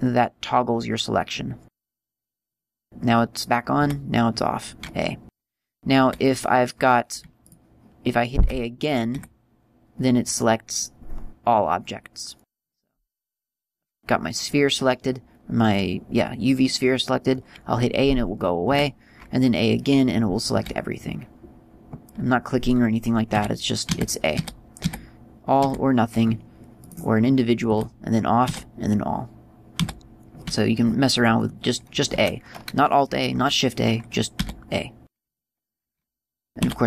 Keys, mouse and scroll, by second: 2.9 right click, 4.2 a, 7.9 right click, 8.8 a, 9.6 a, 13.1 right click, 19.1 a, 27.2 right click, 28.1 a, 31.8-33.4 scroll up 3, 35.7 right click.